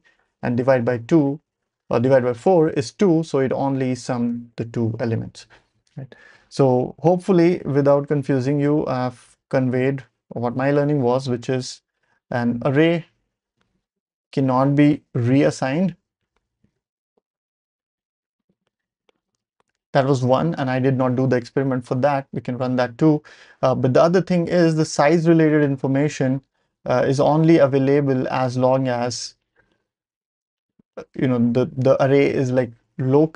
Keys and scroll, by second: 8.5 ctrl+alt+super+p, 9.9 y.